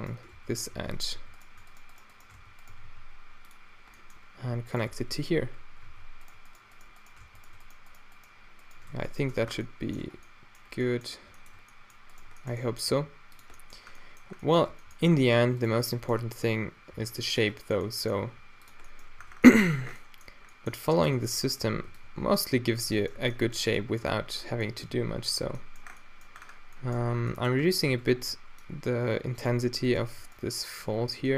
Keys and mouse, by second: 0.4 f, 0.8 z, 1.2 f, 1.8 shift+right click, 2.4 f, 2.7 g, 4.0-4.4 middle drag, 4.9 f, 5.9 alt+w, 7.3 f, 8.9 f, 9.3 Tab, 10.1 Tab, 12.9 g, 13.5-14.1 drag, 14.7 Tab, 15.2 Tab, 16.9 d, 18.3 d, 19.2 Tab, 21.2 Tab, 21.7 a, 21.9 b, 22.6 q, 23.0 right click, 23.9 q, 24.3-24.9 middle drag, 24.9 g, 25.5 middle drag, 25.5 Tab, 27.7 Tab, 27.9 a, 28.2 b, 29.0 q, 31.1-31.3 typing.